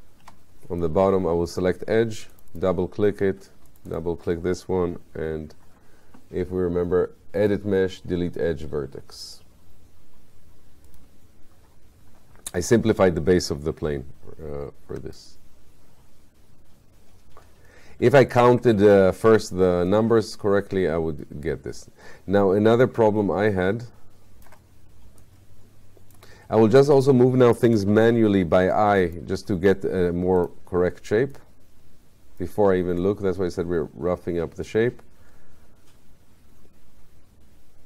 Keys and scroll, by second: 0.3 q, 27.9 w.